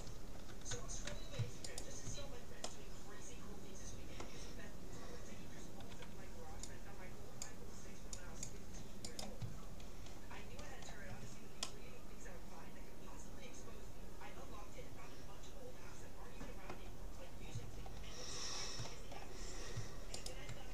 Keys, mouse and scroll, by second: 1.7-3.3 right drag, 2.7-4.3 middle drag, 5.9 c, 9.3-11.1 right drag, 11.1-13.5 middle drag, 17.3 middle click, 17.7-18.2 scroll down 1, 18.2 middle click, 20.3-20.7 right drag.